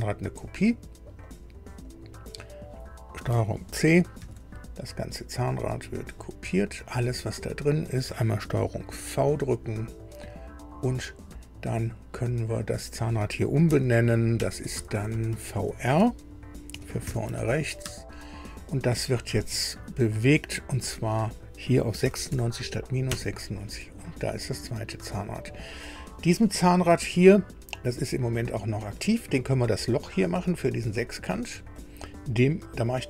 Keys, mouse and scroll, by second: 0.4 click, 1.2 click, 1.8 click, 4.2 ctrl+c, 5.7 click, 7.4 scroll down 2, 8.8 ctrl+v, 10.6-11.0 scroll down 2, 12.6 click, 13.6 F2, 14.3 Right, 14.7-15.6 typing, 16.7 shift+v, 17.0 shift+r, 17.8 Return, 20.7 click, 22.0 KP_9, 22.3 KP_6, 23.0 KP_Enter, 27.5 scroll up 2, 31.8 click.